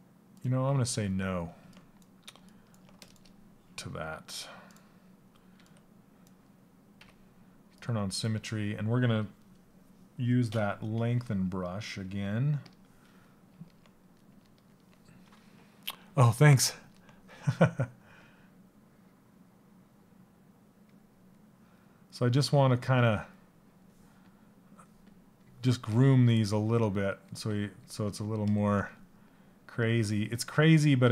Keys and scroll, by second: 5.1 s.